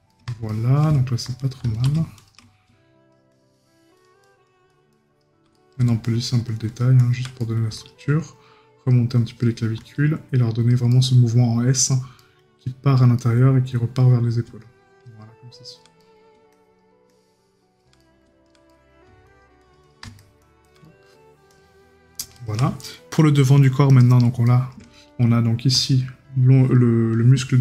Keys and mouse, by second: 5.5 right click, 7.4 right click, 10.9 right click, 12.2 right click, 16.0 right click, 18.0 right click, 20.8 right click, 24.5 right click.